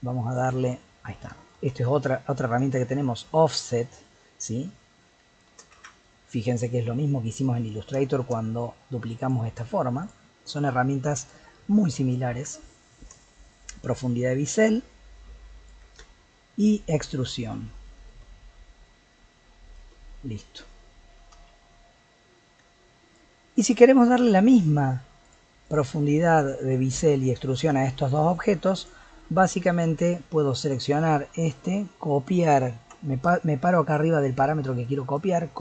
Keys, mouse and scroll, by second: 0.5 ctrl+z, 1.5-4.5 shift+drag, 5.8 ctrl+z, 7.1 middle click, 7.6-8.0 scroll up 1, 8.0-9.2 shift+middle drag, 9.2 click, 10.0 click, 13.1-16.1 shift+drag, 18.1-20.2 shift+drag, 20.2 middle click, 21.1 g, 23.3-24.0 middle drag, 24.0 click, 25.2 click, 25.6 click, 27.7 click, 28.1 click, 28.4 click, 28.8 click, 30.0 click.